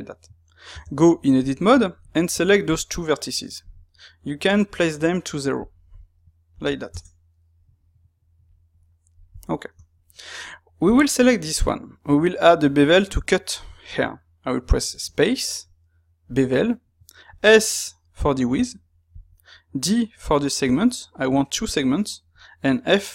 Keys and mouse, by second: 0.6 Tab, 2.0 click, 4.6-9.4 drag, 6.9 KP_Enter, 9.4-10.8 middle drag, 10.8 click, 11.7-14.8 shift+middle drag, 14.8 space, 18.8-23.1 middle drag.